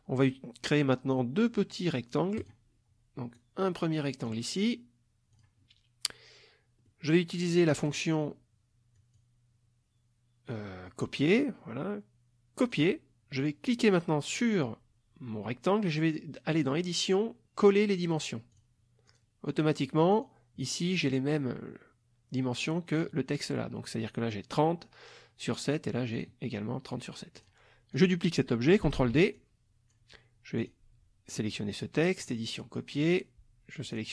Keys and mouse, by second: 2.4 click, 3.3 click, 5.3 click, 6.8 middle click, 7.8 click, 9.0 click, 12.6 click, 13.6 click, 16.5 click, 18.5 click, 19.1 click, 20.1 click, 22.9 click, 26.1 click, 27.3 click, 27.9 click, 29.0 ctrl+d, 29.4-30.1 ctrl+drag, 30.6 click, 32.2 click, 33.0 click, 33.9 click.